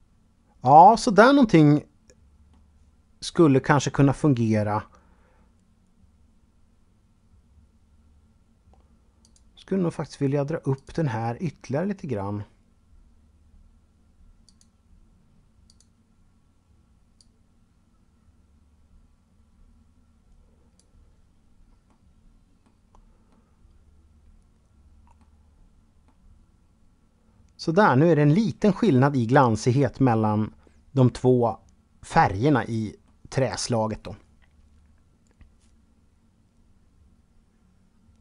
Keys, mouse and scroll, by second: 8.4 click, 9.9 click, 13.6 click, 14.8 click, 21.0 middle click, 22.5 middle click, 25.2 middle click, 28.6 middle click.